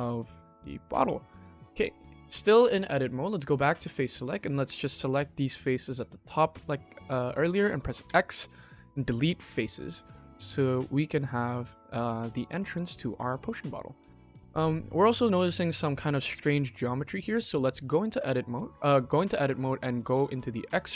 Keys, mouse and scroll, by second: 0.8 middle click, 1.4 shift+middle click, 1.8 middle click, 2.4-3.2 scroll up 1, 3.2 click, 4.0 middle click, 4.7-5.9 drag, 6.5 middle click, 6.6 middle click, 7.9 x, 9.7 middle click, 9.9 Tab, 10.2-10.5 middle drag, 10.8 scroll up 1, 11.1-11.5 scroll down 4, 11.5-11.9 middle drag, 12.4 middle drag, 12.7 KP_1, 14.1 shift+middle drag, 14.1-15.1 shift+scroll up 3, 15.2 shift+middle click, 15.3 shift+middle click, 16.7-17.0 shift+middle drag, 17.7 click, 19.3 Tab, 20.3 click, 20.6 middle click.